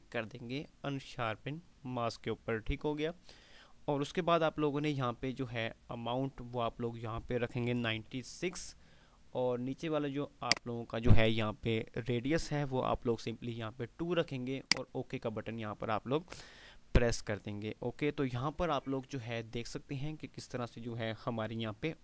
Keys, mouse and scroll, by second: 10.6-11.1 drag, 14.9 click.